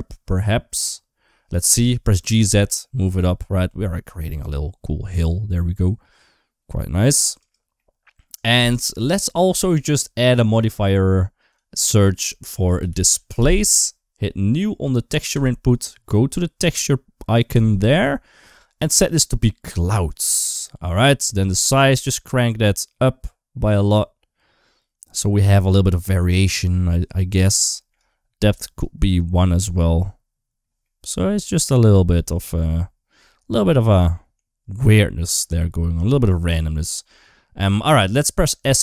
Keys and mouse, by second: 2.1 g, 7.6 middle click, 8.5 Tab, 8.8 middle click, 10.1-13.1 drag, 15.2 click, 17.4 click, 18.8 click, 21.5-26.9 drag, 27.4 shift+middle click, 28.6 click, 30.7 middle click, 33.1-34.1 middle drag, 34.8 middle click, 36.6 middle click, 37.5 middle click, 38.4 s.